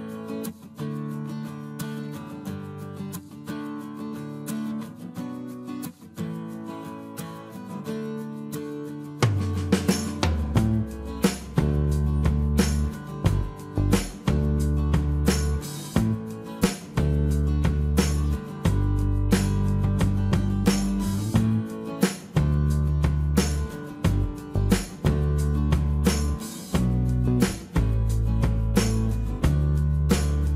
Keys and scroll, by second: 2.0 space, 3.7 m, 4.4 space, 5.2 t, 10.0-12.1 typing, 12.2 Return, 21.3-23.1 typing, 22.6 Return, 23.1 Escape, 26.2 m, 27.9 shift+space, 28.0 Escape, 29.5 shift+m.